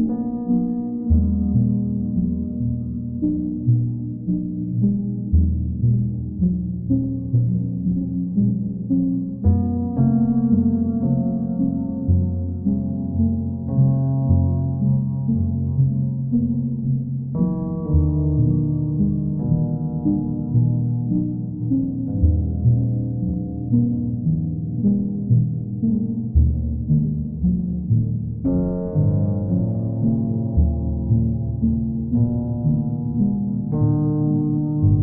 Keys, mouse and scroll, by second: 3.5 click, 5.1 click, 5.4 ctrl+z, 7.4 click, 8.4 click, 10.3 click, 10.4 click, 13.6-14.7 drag, 15.4-16.4 drag, 17.5-18.6 drag, 18.8-19.9 drag, 20.9-21.9 drag, 22.6-23.7 right drag, 24.4-25.4 drag, 29.0-30.9 drag, 32.2 alt+click.